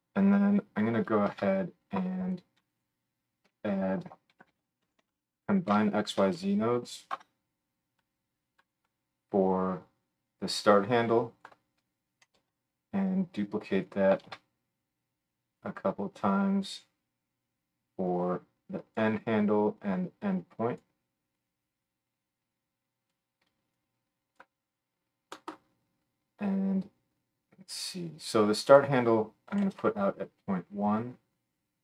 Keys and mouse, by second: 1.3 shift+a, 2.8-10.0 middle drag, 3.5 F3, 10.0-14.0 drag, 12.3 shift+d, 14.0-16.7 shift+middle drag, 14.2 shift+d, 16.7 click, 16.8-18.0 middle drag, 18.0-31.8 drag.